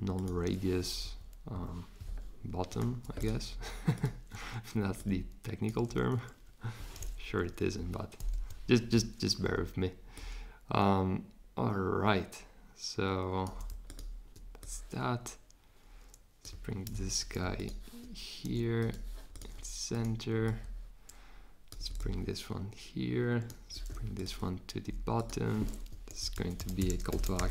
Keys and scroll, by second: 1.0 Up, 1.5 Down, 7.5 Down, 8.3 Up, 16.9 super+g, 25.9 Return, 26.1-27.5 typing.